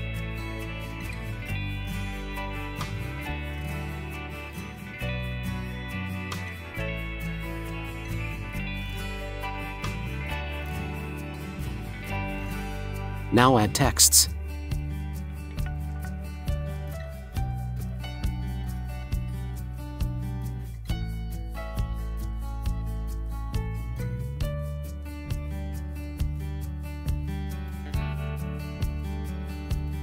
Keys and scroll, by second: 8.0 Caps_Lock, 8.8 r, 9.7 e, 10.1 t, 10.9 r, 11.9 BackSpace, 19.5-21.4 typing, 23.4 ctrl+t, 28.5 Return.